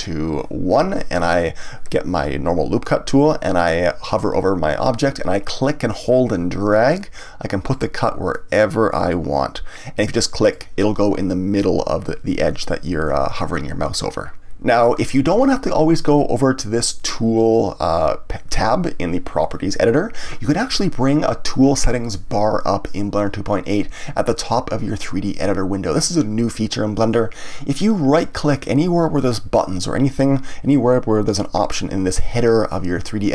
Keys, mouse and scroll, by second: 6.1-11.0 drag.